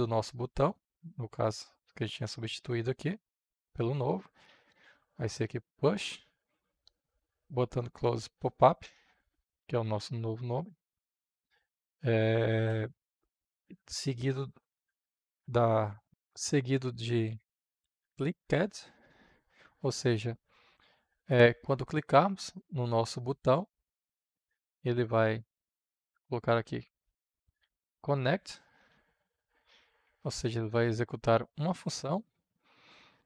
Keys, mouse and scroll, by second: 3.0-4.3 drag, 4.1-5.2 typing, 6.9 Down, 8.7 Return, 10.6-12.6 drag, 12.6 Right, 17.0-19.4 typing, 20.9-24.6 drag, 24.6 >, 26.5-28.6 typing, 29.8 shift+9, 32.0-33.2 drag.